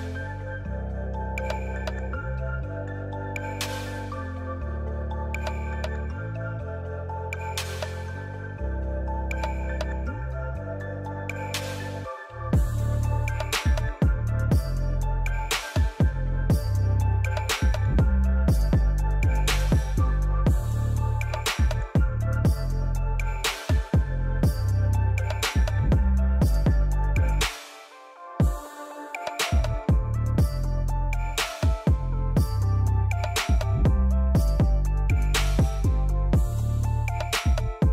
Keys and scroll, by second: 0.8-3.3 typing, 17.6 e, 22.1 a, 31.2-33.1 typing, 33.2 Return, 35.8 p, 37.7 l.